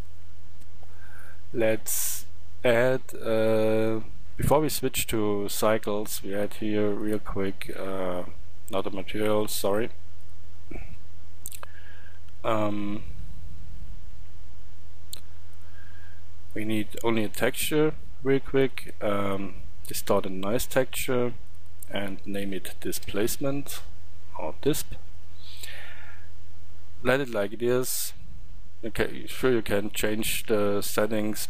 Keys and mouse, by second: 2.7 drag, 7.0-13.1 drag, 13.1 Tab, 14.2 Tab, 23.5-24.7 middle drag.